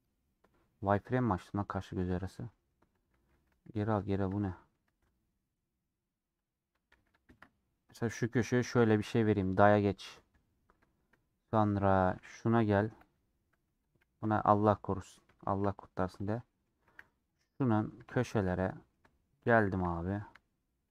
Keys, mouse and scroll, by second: 1.7 click, 2.5 middle click, 2.9 click, 3.5 ctrl+z, 4.9 ctrl+b, 10.4-10.8 scroll down 2, 10.8-12.0 shift+middle drag, 12.0 click, 13.0 /, 13.1-14.1 middle drag, 14.1 /, 14.5 middle click, 14.9 scroll down 2, 15.1 middle click, 15.7-16.1 scroll up 2, 16.1 click, 16.4 middle click, 16.7 Tab, 18.5 middle click, 19.4 shift+click, 19.8-20.9 middle drag.